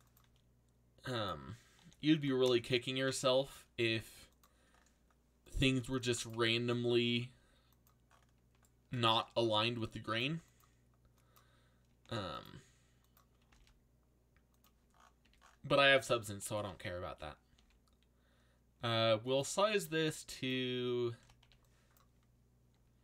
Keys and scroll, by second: 1.1-2.6 typing, 5.6 c, 6.8 g, 12.0 g, 13.1-14.0 typing, 15.2 a, 17.5 s, 20.9-21.9 typing.